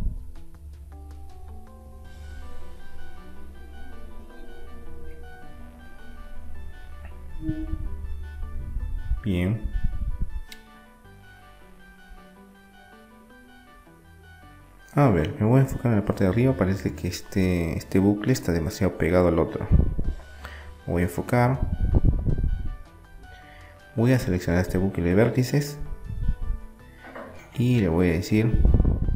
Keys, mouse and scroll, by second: 4.2-6.2 drag, 6.2-8.3 middle drag, 10.8-12.5 drag, 12.8-14.8 middle drag, 15.8-18.1 middle drag, 18.1-19.9 right drag, 19.6-21.2 drag, 21.2-23.8 middle drag, 23.8-27.8 right drag, 27.7 Delete.